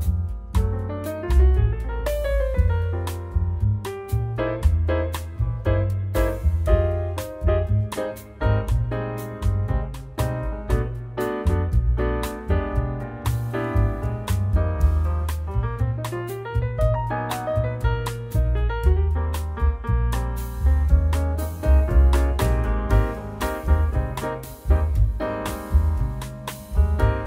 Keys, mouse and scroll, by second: 0.3 shift+a, 9.4-9.9 scroll down 1, 9.9-10.2 scroll down 8, 10.2 middle click, 11.4 click, 12.8 click, 14.4 click, 15.9 shift+a, 20.2 click, 21.2 click, 22.5 shift+a.